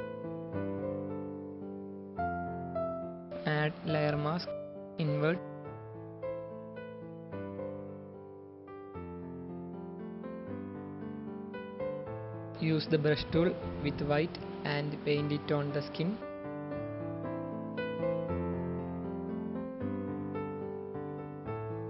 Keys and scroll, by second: 5.4 alt+Delete, 6.7 ctrl+alt+0, 7.6 space, 12.4 b.